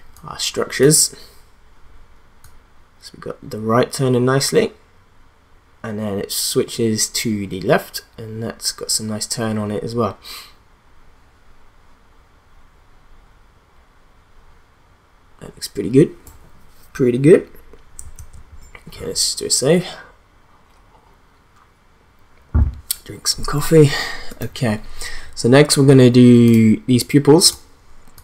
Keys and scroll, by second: 18.2 ctrl+s.